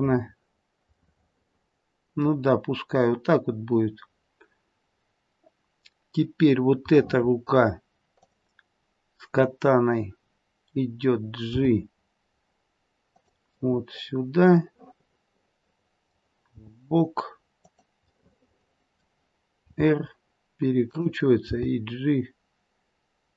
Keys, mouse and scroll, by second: 0.0 scroll down 1, 1.0 middle click, 4.8-5.4 scroll up 1, 5.4-7.0 scroll down 1, 7.0 middle click, 8.2 click, 10.3-11.1 scroll down 2, 11.4 g, 13.5 middle click, 16.6 g, 18.2 middle click, 18.3 middle click, 19.6 middle click, 19.6 r, 21.4 g.